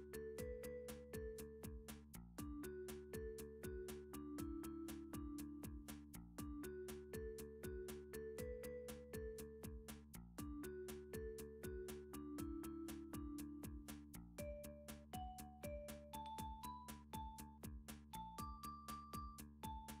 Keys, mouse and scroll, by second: 0.9 click, 1.5 r, 2.2 click, 2.6 s, 3.6 click, 4.1 d, 4.9 click, 5.6 r, 6.3 click, 6.8 s, 8.3 click, 8.7 d, 9.7 click, 10.7 s, 11.7 click, 12.2 d, 13.1 click, 14.0 r, 14.8 click, 15.4 s, 16.6 click, 17.3 d, 18.3 click, 19.4 r.